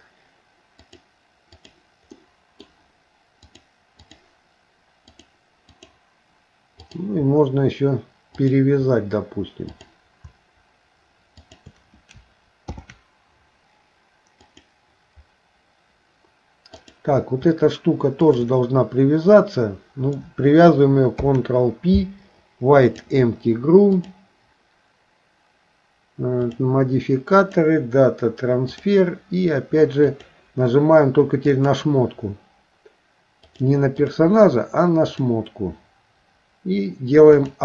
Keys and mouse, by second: 0.8 click, 2.2 middle click, 3.5 click, 6.9 click, 8.4 shift+click, 11.4 shift+click, 12.7 ctrl+p, 16.8 click, 21.2 ctrl+p, 26.5 click, 27.4-28.9 drag, 30.0 click, 33.5 click, 34.0 click, 35.2 click, 37.3 click.